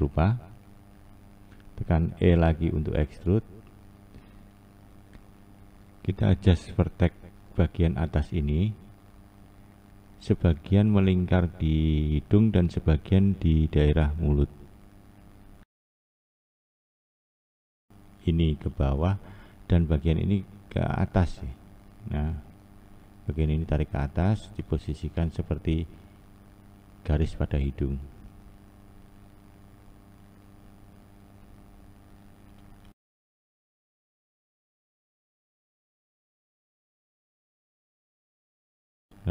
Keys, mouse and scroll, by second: 2.0 e, 6.4-6.8 scroll up 1, 6.8-10.6 scroll down 2, 10.6-11.3 scroll down 1, 16.1 Left, 17.6 1, 18.5 Left, 19.0 Left, 21.5 click, 22.0 click, 24.3 click, 24.8 click, 26.6 click, 27.2 click, 28.3-29.5 scroll up 1, 29.5-30.5 shift+middle drag, 30.5-31.0 scroll up 2, 31.6 click, 32.2 click, 33.5 click, 34.3 click, 35.9 click, 38.9 click.